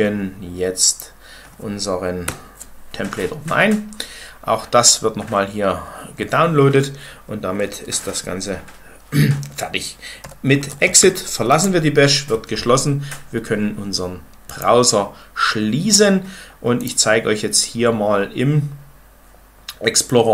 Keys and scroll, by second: 2.2 Return, 9.9-11.5 typing.